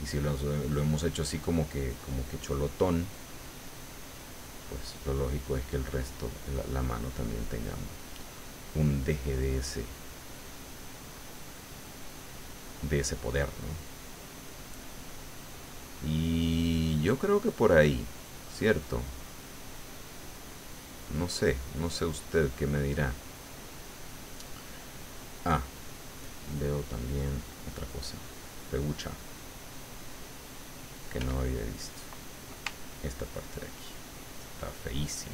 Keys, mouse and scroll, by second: 1.0 click, 1.8 middle click, 2.4-4.5 drag, 5.2 click, 6.1 click, 6.6-9.6 drag, 9.7 middle click, 10.5-12.7 drag, 12.8 middle click, 13.9 click, 14.6-15.9 drag, 16.1 middle click, 16.9-17.9 middle drag, 18.1 middle click, 18.9-23.3 drag, 23.4 middle click, 25.5 click, 26.2 click, 26.9-28.4 middle drag, 29.2 middle click, 30.4 middle click, 31.2 f, 32.0 click, 32.7-35.3 ctrl+drag.